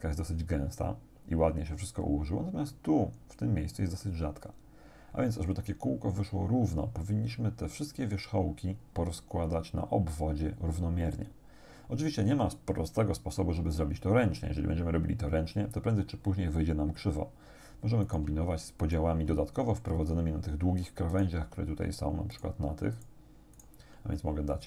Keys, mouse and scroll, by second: 18.1 shift+right click, 18.8 shift+right click, 21.2 shift+right click, 22.4 shift+right click, 23.0 shift+right click, 23.6 shift+right click.